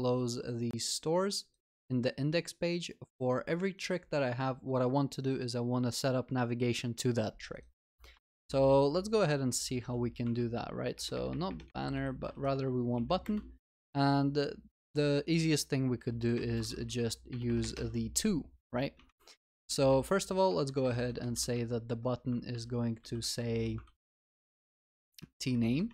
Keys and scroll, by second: 10.3 Tab, 18.7 Escape, 20.8 Escape, 22.5 ctrl+w, 23.8 ctrl+v, 24.2 ctrl+s.